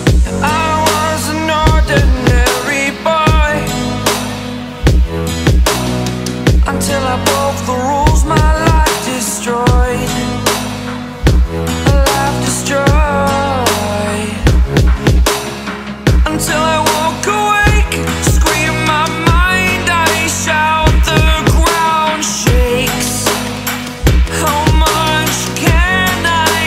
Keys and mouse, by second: 0.3 alt+click, 0.5 typing, 1.3 alt+click, 7.9 ], 8.0 ], 8.2 ], 8.3 ], 10.5 click, 14.5 right click, 15.9 click, 19.7 ], 19.9 ], 20.0 ], 21.9 BackSpace, 22.8 click.